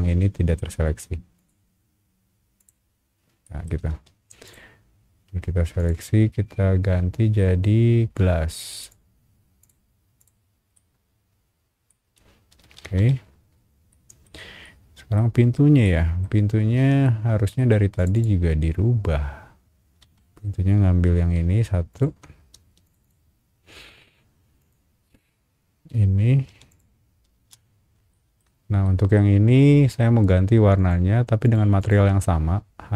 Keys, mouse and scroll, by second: 1.3 shift+click, 2.6 click, 3.4 middle click, 3.9 space, 4.4 click, 5.8 click, 7.3 scroll up 1, 8.8 click, 9.6 click, 10.2 click, 10.7-11.9 middle drag, 11.9 scroll up 1, 12.2 scroll down 1, 12.5 space, 12.8 Escape, 13.2-13.6 scroll down 3, 13.9 middle click, 14.6 middle click, 15.5 scroll up 1, 15.8 middle click, 16.5 scroll up 1, 17.0 shift+middle click, 17.9 shift+click, 18.1 shift+click, 18.5 scroll up 1, 19.8 scroll down 1, 20.0 Escape, 21.1 b, 21.9 alt+click, 22.3 scroll up 1, 22.5 space, 22.8 click, 23.0 click, 23.4 scroll up 1, 24.6 click, 25.8 scroll down 1, 26.5 b, 26.7 click, 27.3 space, 28.1 shift+middle click, 28.8 shift+middle click, 30.7 shift+click, 31.4 shift+click, 31.8 shift+click, 32.4 scroll down 1.